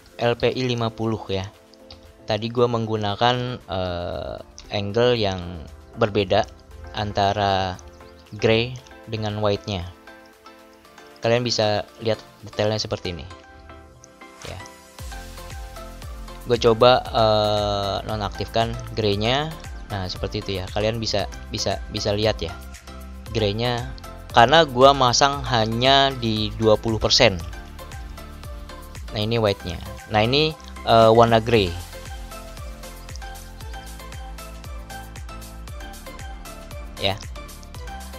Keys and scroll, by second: 12.8 ctrl+=, 32.3 ctrl+-, 37.0 ctrl+=.